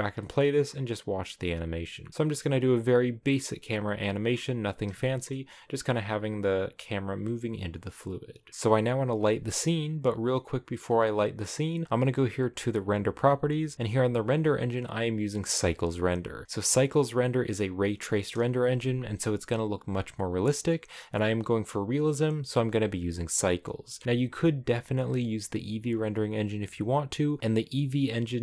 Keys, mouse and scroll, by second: 0.1 shift+middle click, 0.4 scroll up 2, 5.1-8.2 shift+middle drag, 8.5-28.4 shift+middle drag.